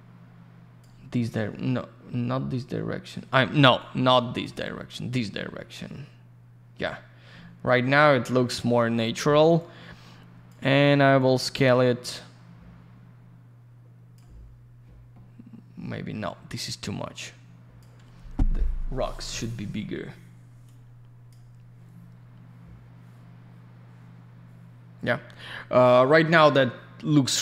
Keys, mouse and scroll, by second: 2.4 scroll up 1, 3.7 click, 6.7 scroll down 1, 7.8 scroll up 1, 9.6 click, 11.2 click, 15.3 scroll up 1, 16.0 scroll down 1, 16.8 click, 20.6 click, 22.1-22.6 scroll up 1, 23.0-23.5 scroll down 1, 25.6-26.5 scroll up 1.